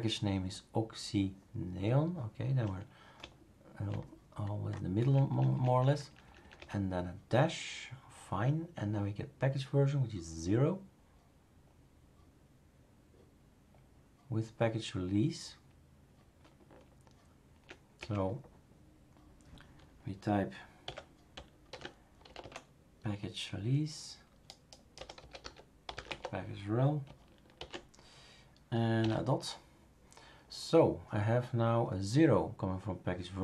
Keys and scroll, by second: 3.2 Right, 3.8 Right, 5.0 Right, 5.3 Right, 5.7 Right, 5.9 Right, 6.0 Right, 6.2 Right, 6.4 Right, 6.5 Right, 16.6 Right, 17.3 Right, 17.5 Right, 18.0 Right, 20.8-22.9 typing, 24.9-27.5 typing.